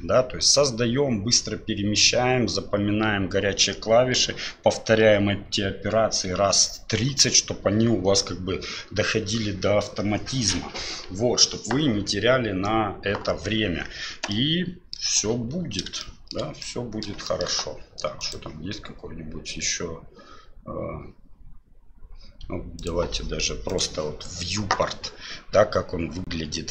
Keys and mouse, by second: 14.4-14.9 middle drag, 16.0-16.3 shift+middle drag, 16.6-17.0 middle drag, 17.2 shift+middle click, 18.2-26.2 drag.